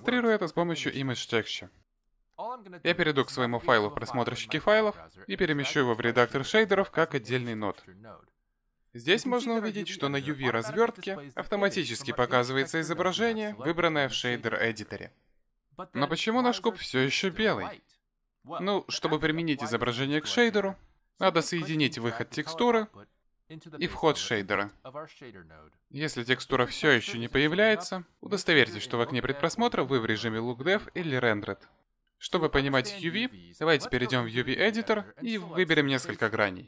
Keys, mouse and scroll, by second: 4.5 click, 5.8 click, 10.1 middle click, 11.0-11.7 scroll down 4, 11.7-12.9 scroll down 8, 13.0 click, 14.3 middle click, 21.5 click, 29.2 z.